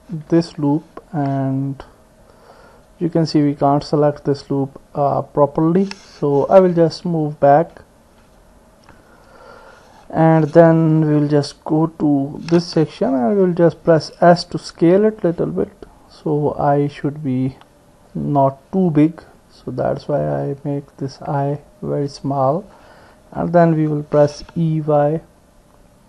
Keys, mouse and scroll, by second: 0.6 alt+click, 1.5-2.5 drag, 2.5 middle click, 6.8 ctrl+z, 7.4 ctrl+z, 7.7 ctrl+z, 8.2 ctrl+z, 8.9 ctrl+z, 10.9 KP_1, 13.7 s, 16.1-17.3 drag, 18.1-20.8 drag, 21.5-22.5 drag, 23.4 e.